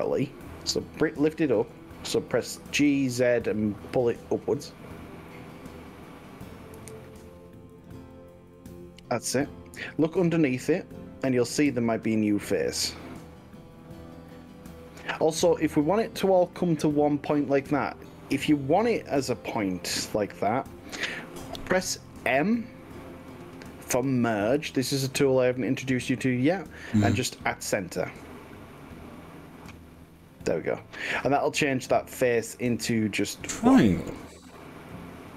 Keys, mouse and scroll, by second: 1.2-1.8 middle drag, 2.7 g, 3.9 z, 7.8 click, 8.1-11.6 middle drag, 11.6 drag, 12.2-12.9 scroll up 3, 13.0-16.5 middle drag, 16.5-18.6 drag, 24.9 m, 30.1-34.3 middle drag, 34.5 click.